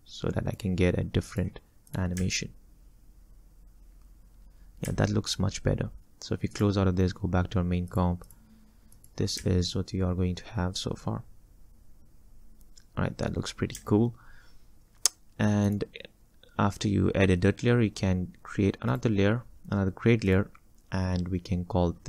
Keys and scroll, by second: 2.2 space, 4.9 space, 9.5 space, 13.8 space.